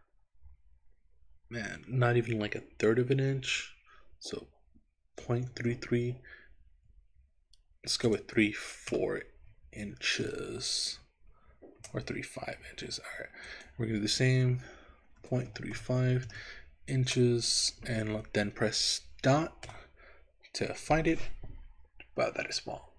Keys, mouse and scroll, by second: 5.7 KP_3, 13.5-17.2 drag, 19.7 KP_Decimal.